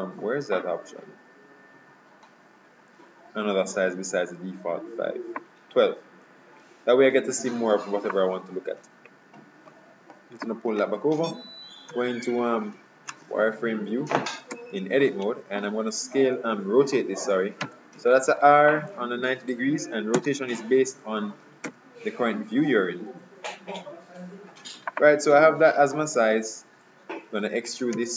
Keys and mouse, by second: 8.2-9.9 drag, 12.0 z, 14.6 Tab, 17.7 r, 21.7 s, 25.9-28.1 middle drag, 28.0 e.